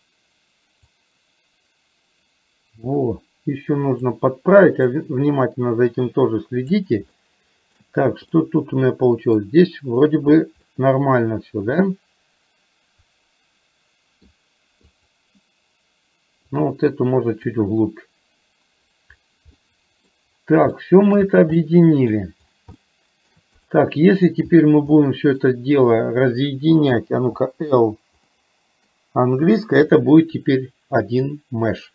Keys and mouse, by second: 1.2-4.2 drag, 5.2-7.0 drag, 7.2 shift+middle click, 8.5-9.5 middle drag, 10.7-14.3 middle drag, 14.8 click, 16.6-17.7 drag, 19.7 middle click, 20.8 shift+middle click, 21.6 middle click, 22.8 shift+middle click, 23.7 click, 25.1 middle click, 28.3 middle click, 30.2-31.9 middle drag.